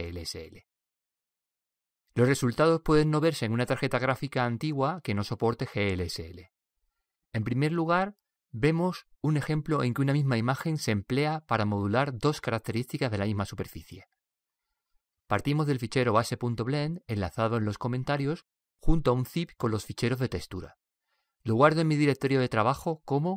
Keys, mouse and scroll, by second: 1.2 click, 22.4 click.